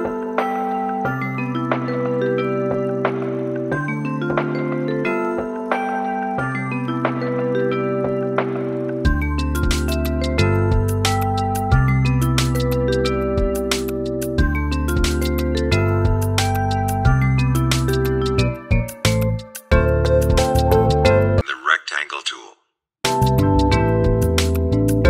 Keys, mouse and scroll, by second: 0.7 click, 2.9 shift+click, 3.5 click, 6.1 space, 7.8 click, 8.8 space, 9.1 click, 9.6 space, 9.9 click, 11.2-12.4 drag, 14.1-18.7 alt+shift+drag, 20.4 right click, 20.8-24.2 drag, 24.6 click.